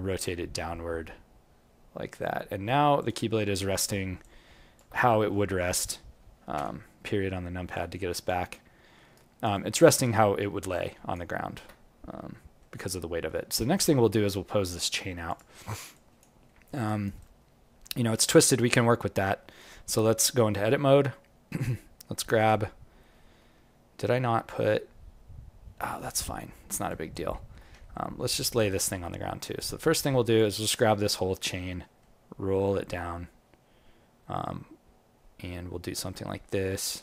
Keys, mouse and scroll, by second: 3.2-3.9 scroll down 1, 3.9 scroll down 5, 4.2 alt+click, 4.9-6.5 scroll down 1, 6.5-7.1 scroll down 1, 7.1-7.7 scroll down 2, 7.1 KP_Decimal, 7.7 alt+click, 8.5 alt+middle click, 9.1 alt+right click, 9.5 alt+click, 11.3 alt+middle click, 11.7-12.1 scroll down 6, 12.3 alt+middle click, 13.0-14.4 scroll up 4, 13.5 q, 15.2 click, 15.9 alt+click, 16.4 alt+middle click, 16.8 alt+right click, 17.2 alt+click, 19.5 click, 20.0 right click, 22.3 click, 23.4 g, 26.8 alt+click, 27.3 alt+middle click, 27.8 ctrl+middle click, 28.0 alt+middle click, 28.7 alt+middle click, 29.5 click, 31.7 g.